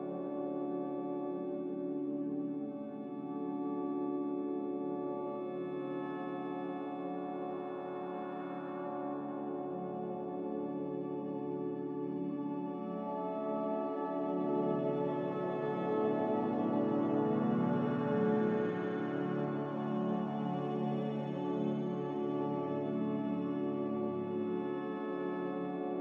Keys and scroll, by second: 8.2 ctrl+z, 11.7 ctrl+b, 13.2 ctrl+b, 19.9 ctrl+z, 25.3 z.